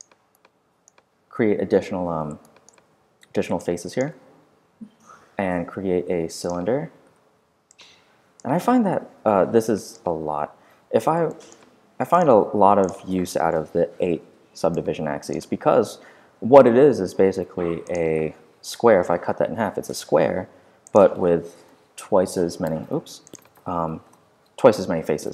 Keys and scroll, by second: 7.0 w, 10.3 super+f, 11.1 f, 13.5 8, 14.5 Return, 18.6 4, 18.6 Return, 21.5 2, 21.6 Return, 23.9 8, 24.0 Return.